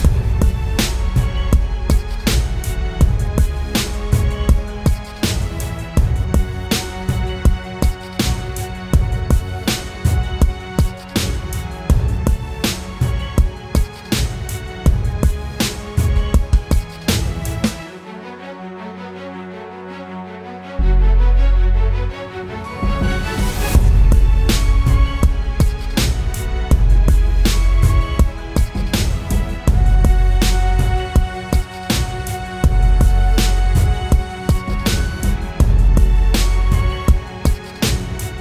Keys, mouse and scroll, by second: 6.0 ctrl+t, 6.9 alt+shift+click, 15.3 Return, 16.5 Down, 17.4 Left, 17.6 Left, 18.6 ctrl+t, 19.7 alt+shift+click, 21.3 Return.